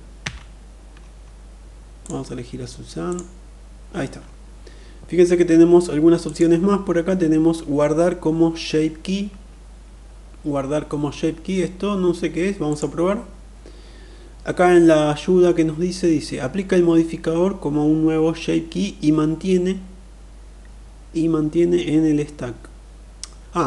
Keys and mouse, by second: 2.6 click, 5.9-11.1 drag, 12.4-23.6 drag.